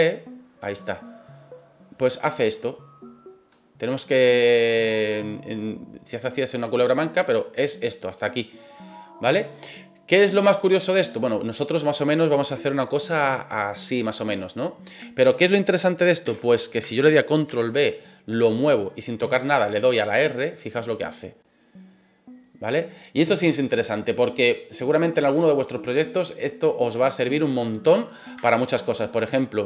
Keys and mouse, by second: 13.8 click, 14.1-15.2 middle drag, 16.2 ctrl+z, 17.5 ctrl+b, 26.9 click, 27.2-28.2 middle drag, 28.5 ctrl+z.